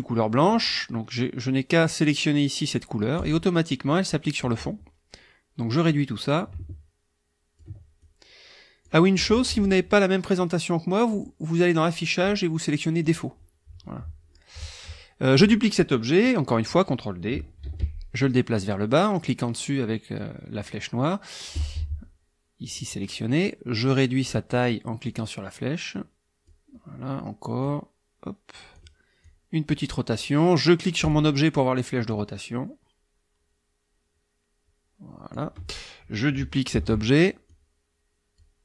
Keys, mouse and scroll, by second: 3.2 click, 5.9-7.8 drag, 8.0 ctrl+click, 11.1 click, 13.0 click, 17.6 ctrl+d, 18.2-20.4 ctrl+drag, 22.6 click, 25.1-26.7 drag, 27.6-28.9 drag, 29.2 click, 31.0 click, 32.1-35.5 drag, 36.7 ctrl+d, 37.5 click.